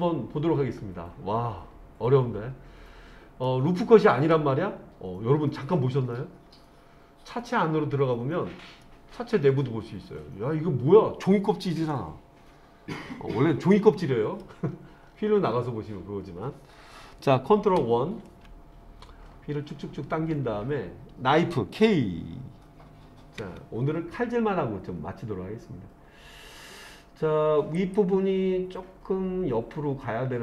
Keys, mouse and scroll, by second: 3.5 middle click, 5.4-6.1 scroll down 3, 6.1-7.5 scroll up 5, 7.5-8.1 scroll up 2, 8.8-14.4 middle drag, 14.7-17.6 scroll down 5, 17.8 ctrl+KP_1, 19.2-20.8 scroll up 3, 23.4 k.